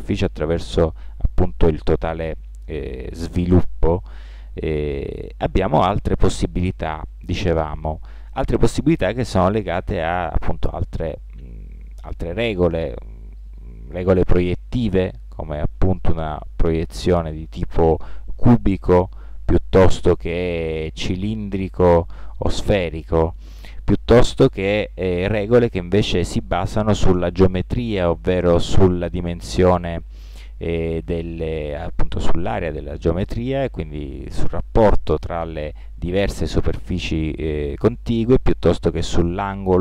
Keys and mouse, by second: 19.4 u, 22.1 u, 24.5 u.